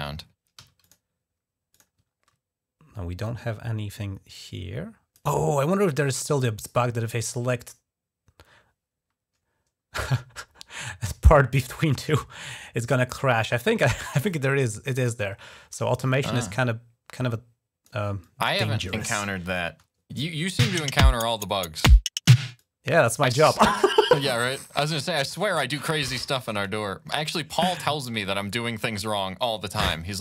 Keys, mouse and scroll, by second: 0.0-0.4 typing, 0.7 click, 1.6 click, 1.9 ctrl+scroll up 2, 4.1 click, 13.1-14.9 drag, 17.0 click, 18.0 click, 19.3 click, 19.5 space, 20.5 click, 22.2 space, 22.4 click, 24.5 ctrl+scroll down 2, 25.9 scroll up 1, 26.9 click, 28.0-29.3 drag.